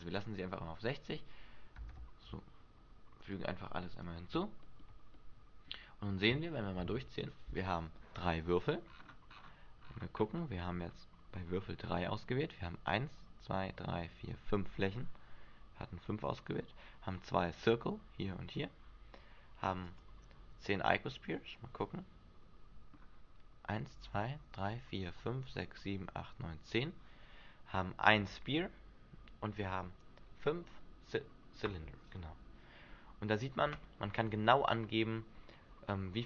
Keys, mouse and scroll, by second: 2.0 alt+a, 3.5 click, 4.8 shift+middle click, 5.3 middle click, 6.1 scroll up 2, 6.6 shift+middle click, 9.0-10.8 scroll down 11, 10.8-12.5 scroll down 3, 20.0 click, 20.9 middle click, 30.4-31.4 scroll up 2, 32.3 middle click.